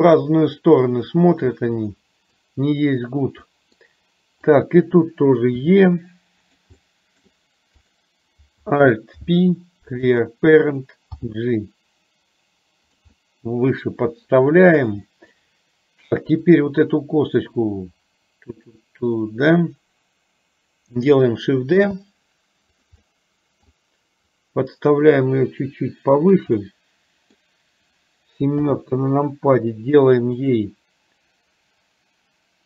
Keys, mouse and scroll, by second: 1.7 middle click, 3.6 middle click, 5.7 e, 6.8 middle click, 8.0 click, 9.2 alt+p, 11.2 g, 13.3-14.3 middle drag, 15.2 middle click, 16.6 click, 21.8 shift+d, 23.1 middle click, 24.3-26.5 drag, 26.6 middle click, 28.6 KP_7, 30.6 click.